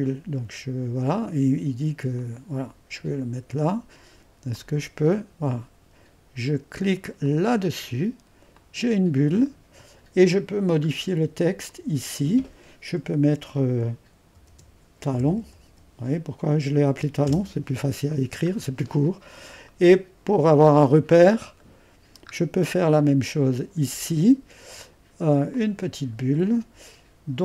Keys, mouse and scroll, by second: 0.0-3.3 drag, 4.6-5.9 drag, 7.3-10.9 drag, 11.8-13.6 drag, 14.4-16.2 typing, 17.3 Return, 21.2-21.7 scroll down 1, 21.7-23.5 middle drag, 23.5-24.5 drag, 25.6-27.4 drag.